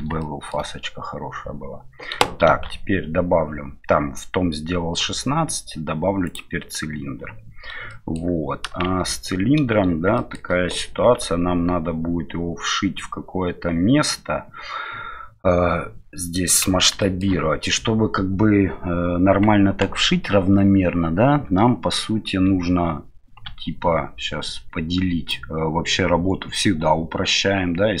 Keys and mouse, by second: 0.2-0.6 shift+middle drag, 2.4 shift+a, 8.0 shift+middle click, 10.2 middle click, 17.1 shift+middle click, 25.4-28.0 drag.